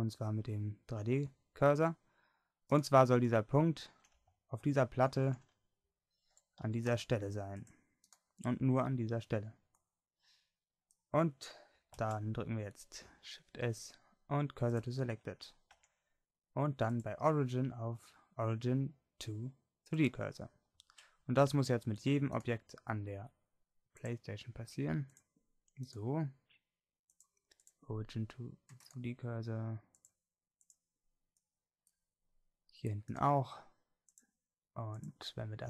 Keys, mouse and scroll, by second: 5.3 shift+Tab, 6.7 a, 6.9 c, 12.0 shift+s, 15.7 Tab, 22.4-34.1 drag, 34.1 middle click, 35.0-35.6 drag.